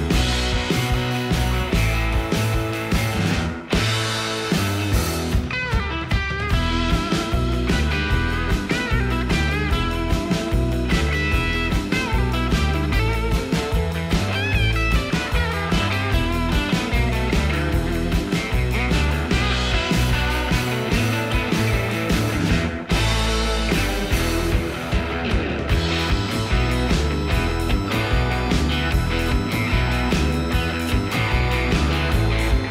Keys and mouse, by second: 0.3 n, 0.6 g, 0.9 z, 8.7 shift+click, 8.8 ctrl+s, 10.2-11.3 drag, 12.7 g, 13.0 y, 15.0-15.6 middle drag, 16.1 KP_1, 16.7 shift+middle drag, 17.4 g, 17.4 z, 22.0-22.3 middle drag, 22.7 shift+middle drag, 23.2 g, 23.6 y, 25.6 ctrl+a, 26.1 Tab, 26.8 click, 27.4 3, 28.5 g, 30.5 click, 30.8-31.2 middle drag, 31.6 a, 32.2 s, 32.3 x.